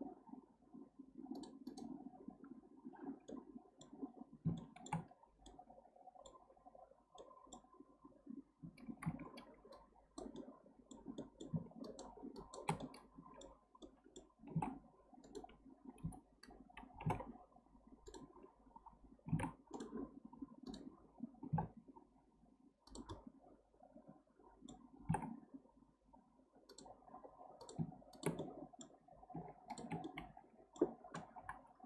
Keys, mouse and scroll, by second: 1.3-3.3 drag, 3.3-4.0 middle drag, 4.0-4.5 scroll up 1, 4.5-5.0 shift+middle drag, 5.0-5.5 scroll up 1, 5.5-8.6 middle drag, 8.6 1, 9.0 alt+z, 9.7 click, 10.4-11.8 middle drag, 11.8 shift+click, 12.3 shift+click, 12.8-14.5 middle drag, 14.5 g, 16.0 o, 16.9 g, 19.3 g, 20.7 drag, 21.4 g, 23.1-25.0 middle drag, 25.0 g, 27.6 click, 28.1 shift+drag, 28.4-29.7 middle drag, 29.7 shift+click, 30.0-31.4 middle drag, 31.4 KP_Decimal.